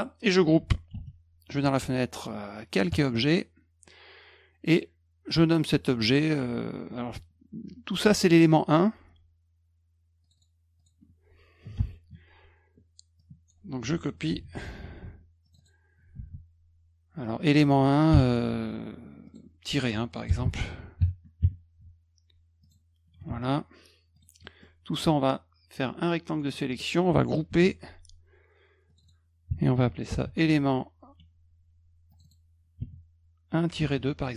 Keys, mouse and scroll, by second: 0.9 ctrl+g, 2.9 click, 10.2 click, 10.4 click, 10.8 click, 11.8 BackSpace, 13.2 click, 14.3 ctrl+c, 15.4 click, 15.6 click, 16.2 ctrl+v, 17.2 click, 18.1 BackSpace, 19.3 click, 20.3 8, 22.6 click, 24.1 click, 24.4 middle drag, 25.2-26.4 drag, 27.5 ctrl+g, 28.9 click, 29.0 click, 30.1 ctrl+v, 32.1 click, 32.2 click, 33.8 ctrl+c, 34.3 click.